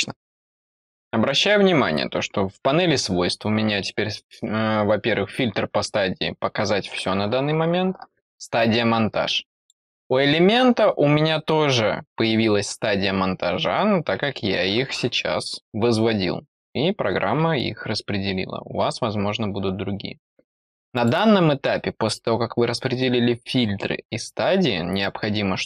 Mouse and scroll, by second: 9.5 click, 20.9 click, 24.9 click.